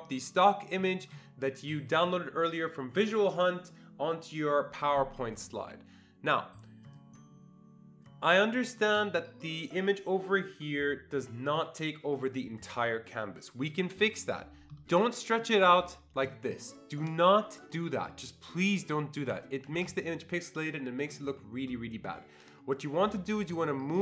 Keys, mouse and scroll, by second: 6.8-9.5 drag, 15.4-22.1 drag, 19.2 ctrl+z, 19.7 ctrl+z.